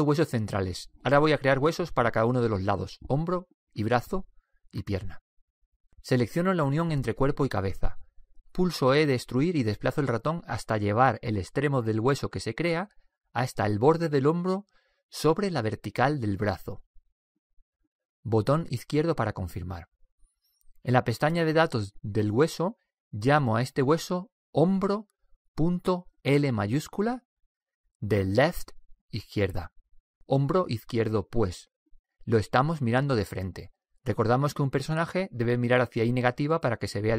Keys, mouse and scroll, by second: 0.7 middle click, 2.1 click, 2.1 right click, 2.6-4.5 middle drag, 7.1 right click, 9.5 e, 18.9-20.6 drag, 20.7 click, 21.9-23.6 drag, 23.9-25.6 drag.